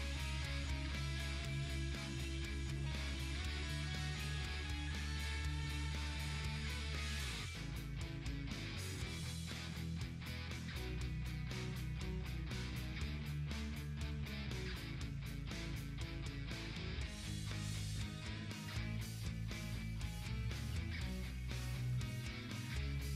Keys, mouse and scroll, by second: 1.2 ctrl+t, 2.2-3.7 drag, 3.7-6.8 ctrl+drag, 6.8-9.3 ctrl+drag, 9.3 click, 11.8-12.5 typing, 13.1-17.5 ctrl+drag, 17.5-19.0 drag, 19.0-22.6 ctrl+drag, 22.6-23.1 ctrl+drag.